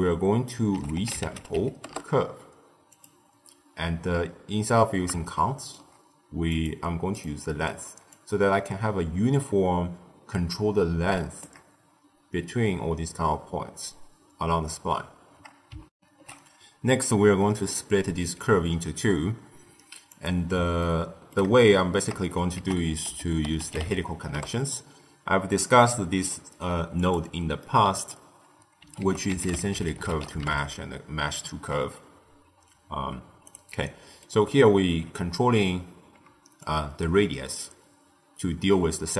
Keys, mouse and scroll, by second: 5.2-7.2 shift+middle drag, 7.2-11.1 drag, 15.9 ctrl+alt+shift+q, 20.0 click, 20.7-22.5 ctrl+middle drag, 22.5 ctrl+a, 27.5 middle click, 28.0-28.9 scroll up 1, 28.9 ctrl+a, 33.7-36.5 middle drag, 36.5-39.1 shift+drag.